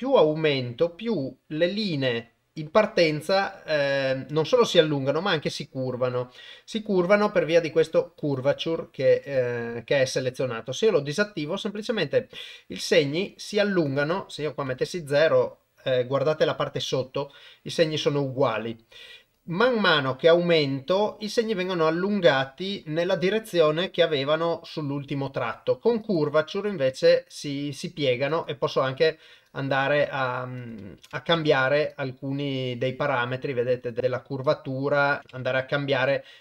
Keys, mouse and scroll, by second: 8.2 click, 9.2 click, 10.1 click, 11.8-13.6 drag, 13.9 click, 19.3-23.1 drag, 26.0 click, 28.3-28.7 drag, 29.6 click, 30.7 click, 32.0-33.9 drag, 34.4 click, 35.9 click.